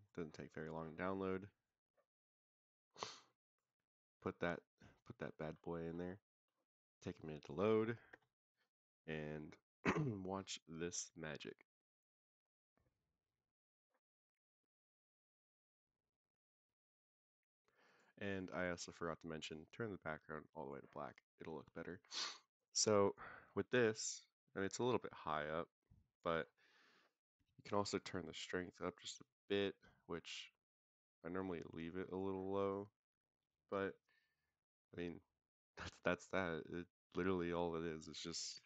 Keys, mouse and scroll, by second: 1.4 click, 6.9-7.6 middle drag, 8.0 KP_0, 8.7 scroll up 1, 14.3 click, 18.6 click, 19.3 click, 22.2 scroll down 2, 23.0 click, 23.9 scroll down 1, 25.2-26.2 drag, 26.3-27.0 scroll up 3, 27.5 click, 27.5 scroll up 1, 28.3 click, 34.8-37.2 middle drag, 37.4 click, 37.7 scroll down 3, 38.5 s.